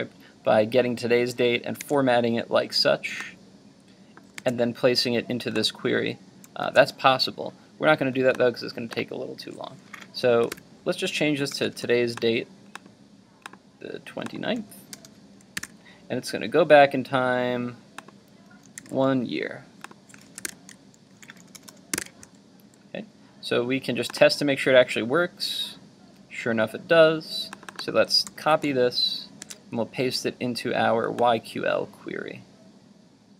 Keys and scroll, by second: 1.9 super+Tab, 28.3 super+c, 29.5 super+Tab.